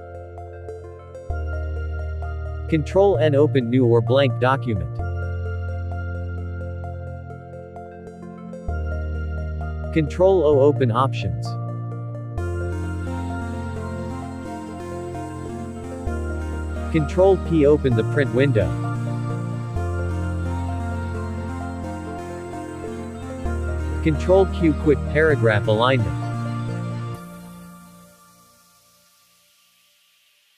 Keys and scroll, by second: 2.4 ctrl+n, 6.6 ctrl+n, 13.8 ctrl+o, 20.8 ctrl+p, 27.9 ctrl+q.